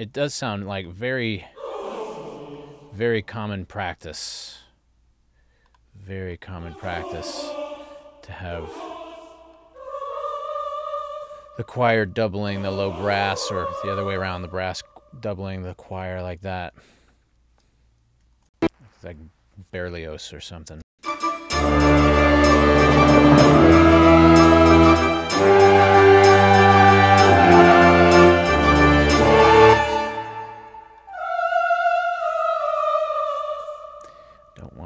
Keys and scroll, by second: 18.5 ctrl+alt+l, 20.9 space, 29.7 space.